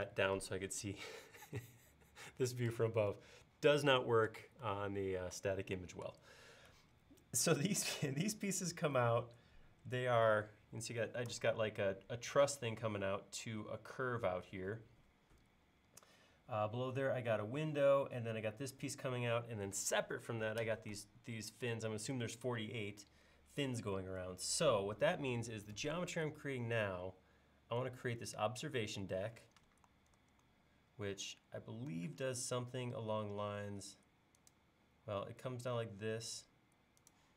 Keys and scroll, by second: 30.2 super+Tab.